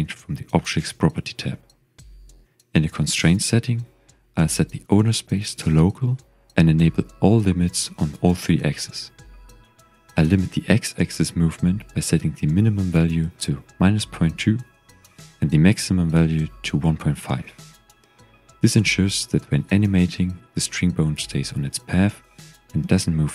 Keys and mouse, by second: 2.3 click, 4.9-6.3 drag, 10.0-11.4 drag, 14.9-17.3 drag, 18.6 g, 18.7 x, 20.2 drag, 20.7 g.